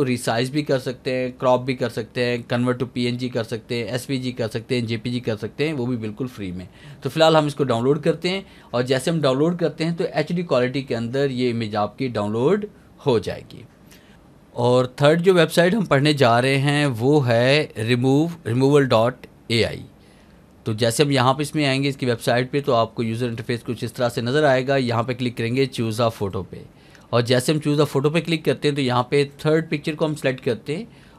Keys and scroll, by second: 14.1 alt+a.